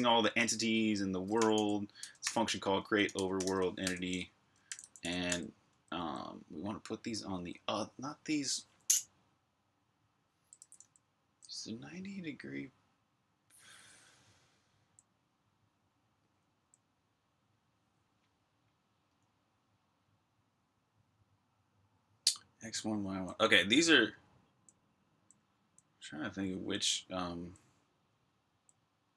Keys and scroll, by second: 0.2-5.8 typing, 10.4-11.1 typing, 14.4-14.8 typing, 15.9-16.7 typing, 22.9-28.3 typing.